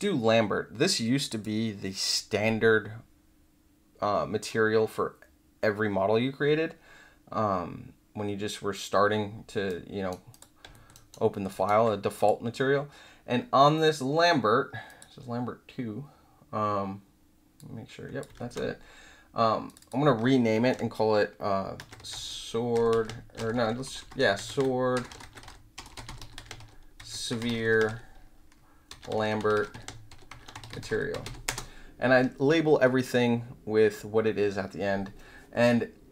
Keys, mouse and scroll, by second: 1.2 click, 9.8-10.1 right drag, 10.3 click, 10.7 alt+middle click, 10.9 alt+right click, 11.3 alt+middle click, 11.5 alt+right click, 12.1 click, 14.8 click, 17.5 click, 18.3 ctrl+z, 19.6 click, 19.7 click, 21.5-31.6 typing.